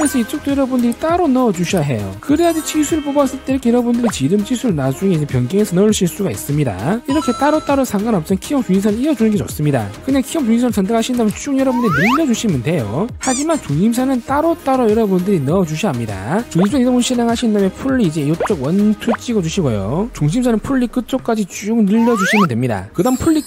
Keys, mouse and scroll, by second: 0.4 click, 1.1 click, 1.9 click, 2.5 click, 3.5 click, 4.0 right click, 5.0 click, 5.8 click, 6.5 click, 11.6-12.7 drag, 12.8 click, 14.8 click, 15.4 click, 17.9 click, 18.3 scroll up 1, 18.9 click, 19.5 click, 20.2 click, 21.1 middle click, 21.9-23.0 drag.